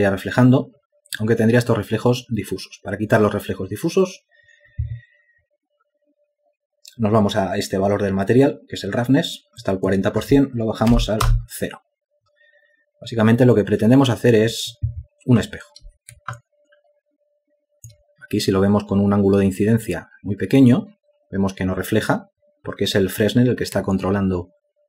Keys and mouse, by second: 11.7 Return, 16.9 alt+click, 24.5 alt+click.